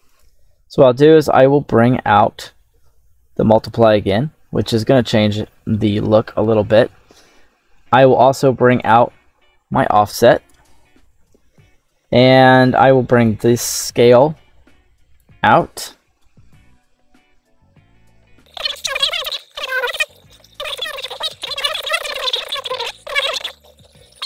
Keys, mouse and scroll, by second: 2.2 click, 4.1 scroll down 2, 4.6 shift+middle click, 5.6-6.1 middle drag, 7.2 middle click, 8.6-10.4 drag, 13.1 click, 16.1 middle click, 17.3-18.7 middle drag, 18.9 middle click, 18.9-19.3 scroll down 3, 19.3 click, 19.6-20.0 scroll up 4, 19.6 middle click, 20.3 right click, 20.8 space, 21.7 click, 22.2 middle click, 22.5-22.8 drag, 22.9 scroll up 1, 23.0 shift+middle click, 23.4 click.